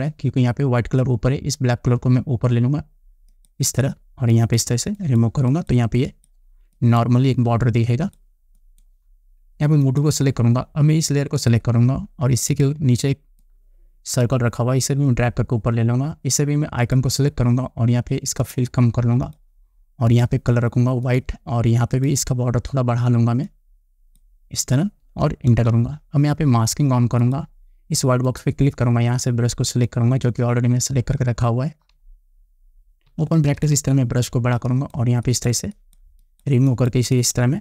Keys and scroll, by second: 26.1 Return.